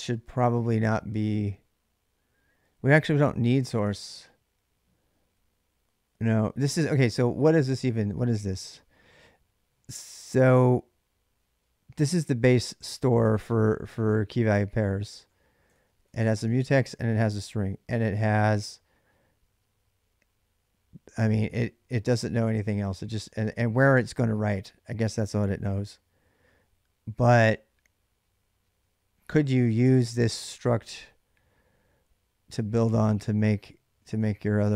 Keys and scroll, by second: 0.0-0.2 typing, 7.1 ctrl+[, 7.3 k, 7.5 k, 13.1 j, 13.3 j, 14.7-16.6 typing, 33.6 j, 33.8 j, 34.4 j.